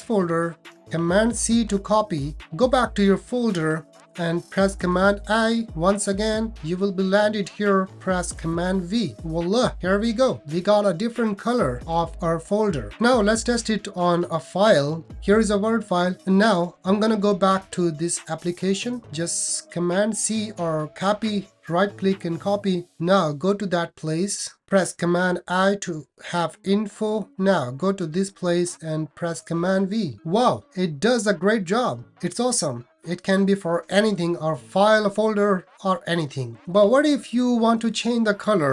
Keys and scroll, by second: 1.6 super+c, 4.7 super+i, 8.5 super+v, 15.0 super+v, 25.2 super+i, 29.3 super+v.